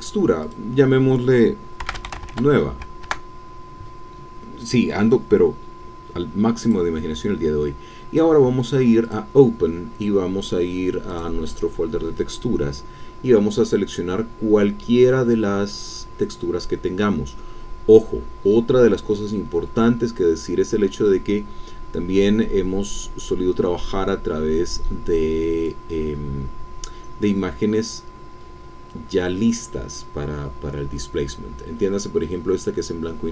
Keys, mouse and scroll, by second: 1.7-2.7 typing, 3.0 KP_Enter, 6.6 click, 9.0 click, 11.1 click, 13.0-13.6 scroll down 2, 13.6-14.3 scroll down 1, 16.4-17.5 scroll down 3, 18.1-18.7 scroll down 2, 18.7-21.4 scroll down 1, 21.4-22.4 scroll down 1, 22.4-23.7 scroll down 1, 23.7-25.1 scroll down 1, 25.1-25.8 scroll down 1, 26.8-28.5 scroll down 2.